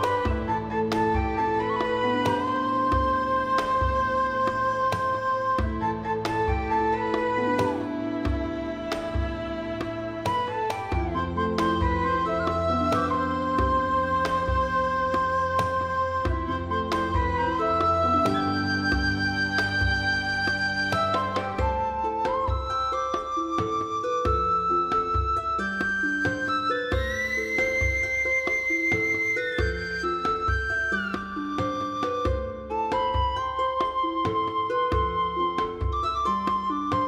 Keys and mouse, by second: 0.0 click, 0.2 click, 0.5 alt+z, 1.0 shift+middle click, 1.5 click, 2.1 alt+z, 2.3 middle click, 3.0 click, 3.2 g, 3.6 click, 3.8 click, 4.2 click, 4.3 g, 4.6 click, 5.0 alt+z, 5.1 shift+click, 5.4 click, 5.5 alt+click, 5.7 alt+click, 5.9 shift+middle click, 6.2 shift+middle click, 6.6 alt+z, 6.7 shift+middle click, 7.2 ctrl+r, 7.6 right click, 7.8 shift+middle click, 8.5-9.6 shift+middle drag, 9.6 alt+middle click, 9.9 shift+middle click, 10.4 shift+middle click, 11.8 shift+middle click, 12.1 shift+middle click, 12.7 shift+middle click, 13.3 click, 13.7 shift+click, 14.0 g, 14.1 middle click, 16.2 click, 16.4 click, 16.6 g, 16.6 middle click, 17.0 right click, 17.3 g, 17.9 middle click, 18.5 click, 18.9 shift+middle click, 19.1 g, 19.1 middle click, 20.1 click, 20.4 click, 21.1 middle click, 21.5 click, 21.6 alt+z, 21.9 g, 22.5 click, 22.7 alt+middle click, 23.2 click, 23.4 alt+z, 23.6 click, 23.8 g, 24.0 right click, 24.1 click, 24.3 g, 24.6 click, 24.8 alt+z, 24.8 middle click, 25.5 Tab, 25.7 alt+middle click, 25.8 alt+middle click, 26.2 shift+middle click, 26.5 shift+middle click, 26.8 shift+middle click, 27.4 shift+middle click, 27.8 Tab, 28.2 shift+middle click, 28.5 alt+z, 28.8 click, 29.2 shift+click, 29.6 g, 31.6 right click, 31.8 alt+middle click, 32.0 shift+middle click, 32.2 alt+z, 32.6 click, 32.8 g, 33.3 click, 33.7 g, 34.8 click, 35.1 g, 35.8 click, 36.2 click, 36.6 g.